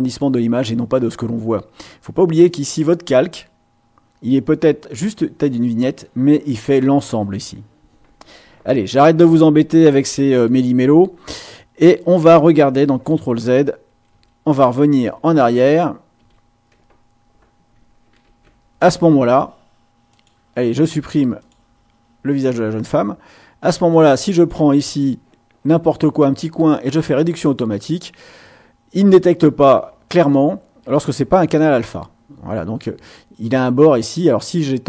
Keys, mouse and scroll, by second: 9.2 ctrl+shift+a, 10.5 Escape, 13.0 ctrl+z, 14.1 ctrl+z, 16.1 ctrl+z, 18.3 ctrl+shift+a, 20.1 click, 21.3 click, 23.9 click, 27.0 click.